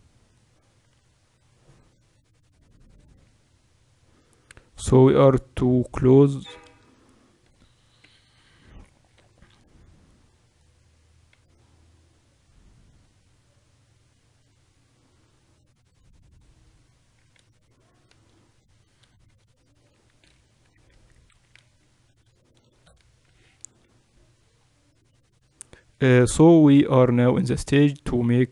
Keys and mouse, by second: 0.4-2.6 drag, 3.3 Tab, 3.8-5.0 middle drag, 5.0-7.0 right drag, 6.2 Tab, 6.6 a, 7.0-9.8 middle drag, 8.2 b, 10.6-16.7 drag, 16.7 Tab, 20.8-21.1 KP_2, 21.3-21.8 KP_6, 23.2 z, 24.2 middle click, 25.5-28.5 middle drag.